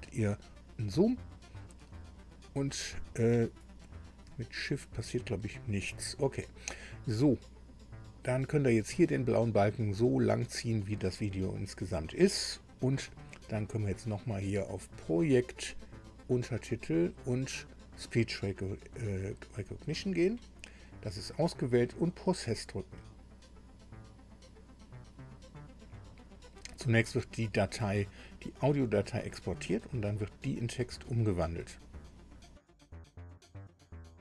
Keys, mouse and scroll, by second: 0.4 ctrl+scroll down 2, 1.4 ctrl+scroll up 2, 2.0 ctrl+scroll down 2, 4.5-4.8 shift+scroll up 2, 5.0 shift+scroll down 2, 5.2 shift+scroll up 2, 8.6-10.8 drag, 14.9 click, 16.2 click, 19.5 click, 23.0 click.